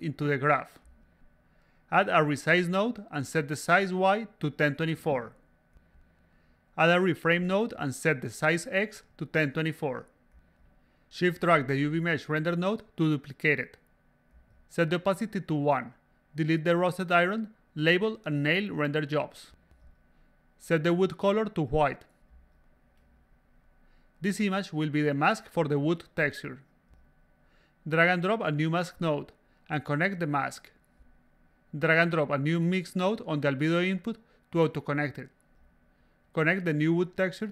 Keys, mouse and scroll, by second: 0.7 click, 2.7 click, 4.1 click, 5.0 click, 5.2-6.5 typing, 7.2-8.3 drag, 9.1 click, 9.6-10.8 typing, 12.2 click, 12.7 s, 12.8 click, 14.1 click, 15.3-16.2 drag, 17.8 click, 19.0 click, 19.7 click, 20.5 click, 21.2 click, 21.6 click, 22.6 drag, 23.6 click, 24.4 drag, 26.9 click, 29.3 click, 30.5 click, 32.1 click, 32.5-35.4 drag, 35.8 click, 37.3-37.5 drag.